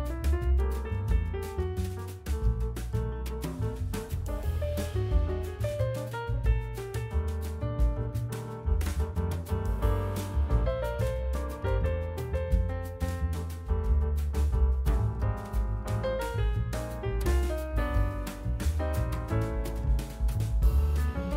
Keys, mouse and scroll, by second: 0.6 KP_1, 1.0-1.5 scroll up 4, 1.5-2.2 shift+middle drag, 2.2-3.1 scroll up 3, 3.1 g, 4.2 s, 5.7 Tab, 5.9 click, 6.7 i, 8.5 e, 13.0 Tab, 14.5 ctrl+2, 15.0 Tab, 16.0 click, 16.7 3, 17.0 click, 17.8 i, 18.8 Tab, 19.3-20.1 right drag, 20.1-20.9 scroll down 1, 20.9-21.3 drag.